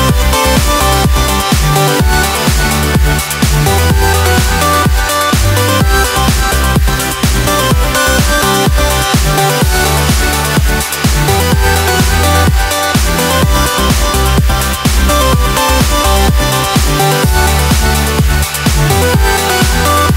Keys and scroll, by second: 13.0 ctrl+j.